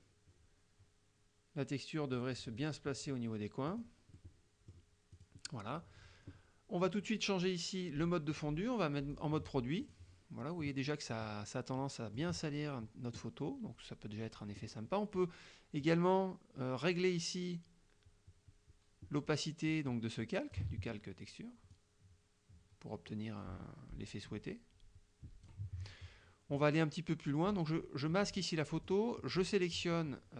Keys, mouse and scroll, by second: 3.7 click, 4.2-5.0 middle drag, 5.2 click, 8.4 click, 9.2 click, 9.9 click, 11.2 middle click, 11.9 middle click, 15.9-20.8 drag, 21.8-25.7 drag, 26.6 click, 28.9 click, 29.3 click.